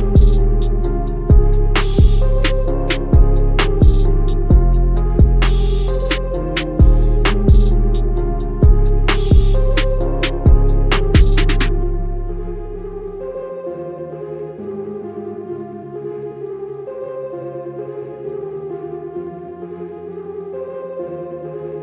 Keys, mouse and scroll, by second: 1.4 ctrl+z, 2.7 click, 7.8-10.1 drag, 15.7 click, 19.9-21.8 drag.